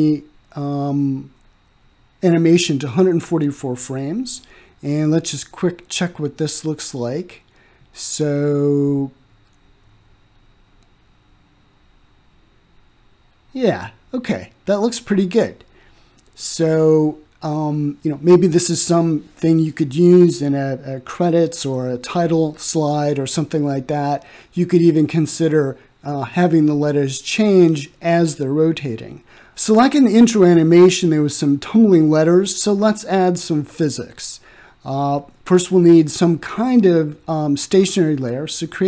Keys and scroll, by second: 0.5-1.5 typing, 9.4 1, 9.7 4, 10.4 Return.